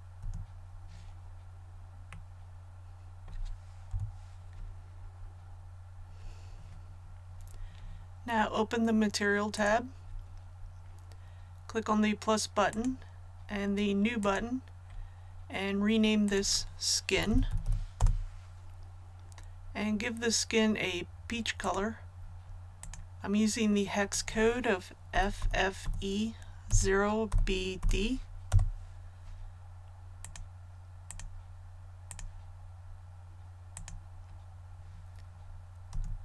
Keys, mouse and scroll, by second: 0.1 a, 1.2 click, 2.0-3.3 middle drag, 3.8 KP_1, 4.9 scroll down 1, 9.5 click, 17.1-17.6 typing, 17.9 Return, 21.5 click, 25.0-27.7 typing, 30.1 click, 35.8 a.